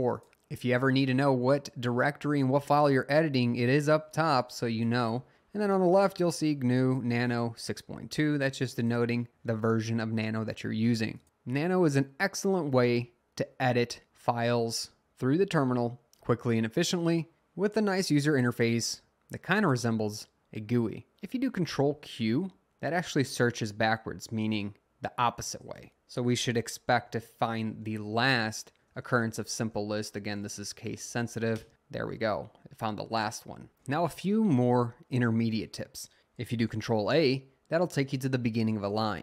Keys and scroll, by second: 26.5-32.0 typing, 36.7 a.